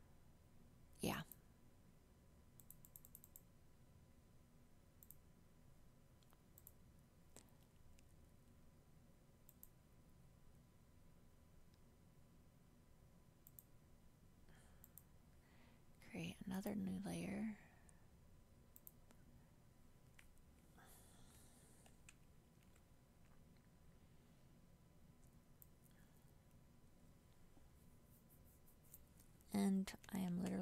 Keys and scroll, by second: 30.4 ctrl+z.